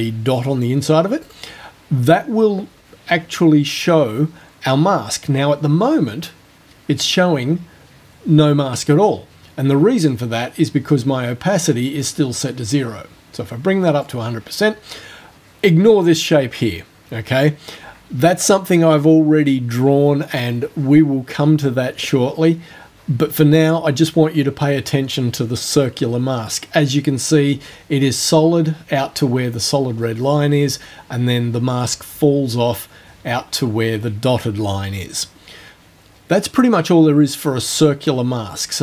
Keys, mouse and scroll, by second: 1.3 click, 12.1-14.2 drag, 14.2-17.5 scroll down 1, 38.5 right click.